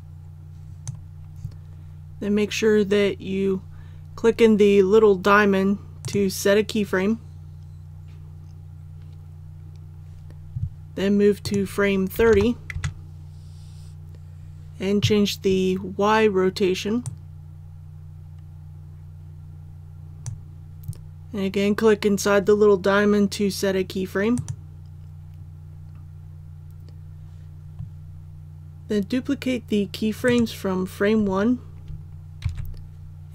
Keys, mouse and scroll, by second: 12.1 KP_3, 12.3 KP_0, 17.0-20.6 drag, 30.2 right click, 32.4 shift+d.